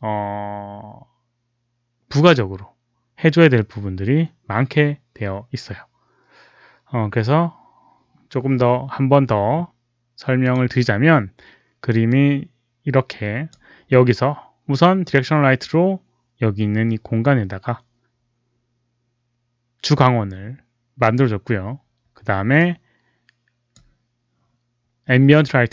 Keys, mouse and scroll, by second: 10.3 click, 12.0-13.4 drag, 22.5-23.7 drag.